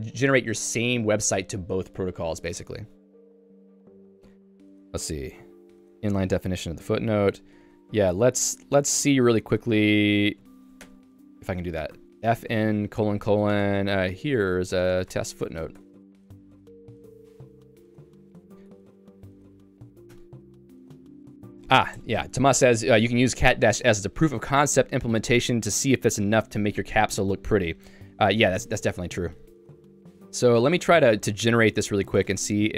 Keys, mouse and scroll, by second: 10.4 click, 10.8 Escape, 11.0 o, 11.4 Return, 11.9 [, 12.4 f, 14.6-19.9 typing, 20.2 Escape, 30.0 ctrl+s.